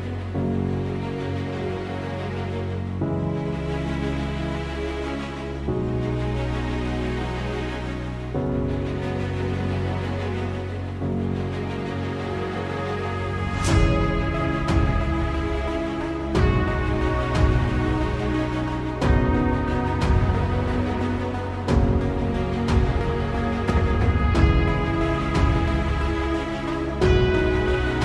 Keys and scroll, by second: 4.1-5.7 typing, 7.1 g, 7.3 z, 7.9 g, 8.0 y, 13.3 g, 14.1 z, 14.4 shift+d, 14.8 z, 16.4 a, 17.9 shift+d, 18.5 y, 21.7 shift+d, 22.2 y, 25.1 shift+d, 25.5 y.